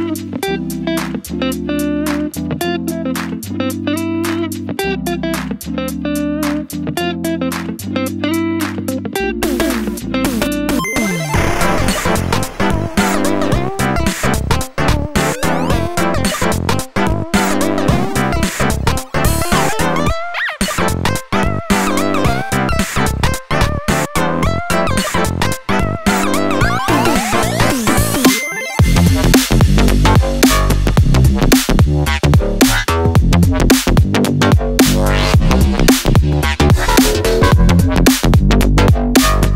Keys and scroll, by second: 3.8 ctrl+c, 4.0 ctrl+v.